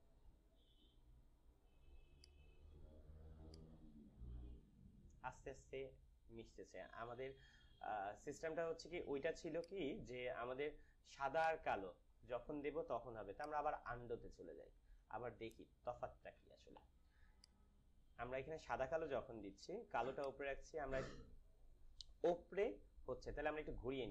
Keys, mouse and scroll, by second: 7.1 click, 7.3 ctrl+z, 9.5 click, 14.3 z, 17.2 click, 20.2-23.4 drag.